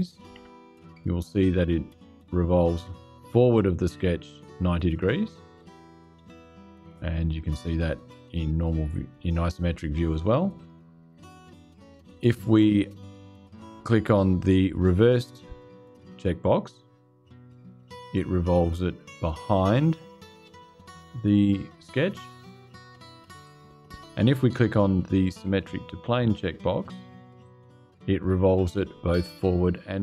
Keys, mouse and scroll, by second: 0.1 KP_0, 7.0 click, 10.3 click, 16.6 click, 23.2 click, 27.2 click.